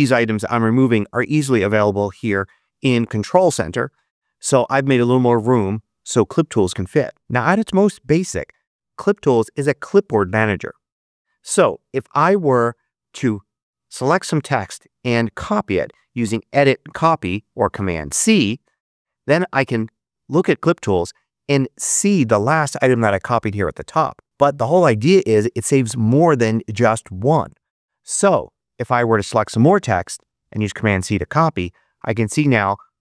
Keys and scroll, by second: 30.1 super+c.